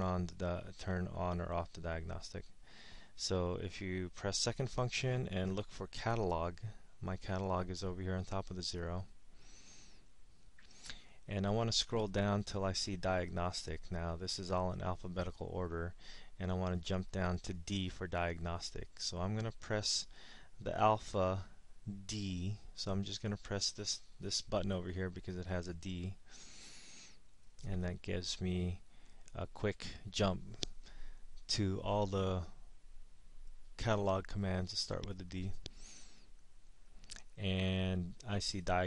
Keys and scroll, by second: 9.0 0, 12.6 Down, 13.2 Down, 14.0 Down, 29.2 Down, 30.1 Down, 31.5 Down, 32.1 Down, 33.6 Down, 34.5 Down, 37.7 Down.